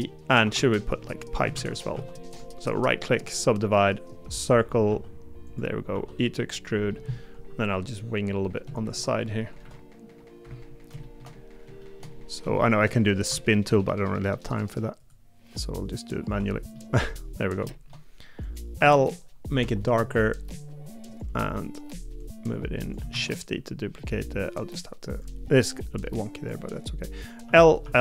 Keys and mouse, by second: 0.4 3, 1.5 shift+d, 1.9 s, 4.9 s, 5.9 e, 6.9 middle click, 7.4 KP_3, 8.7 shift+middle click, 9.6 KP_1, 11.0 middle click, 11.8 shift+middle click, 12.6 shift+middle click, 16.7 middle click, 17.7 shift+middle click, 19.6 g, 23.1 shift+d, 26.1-27.8 drag.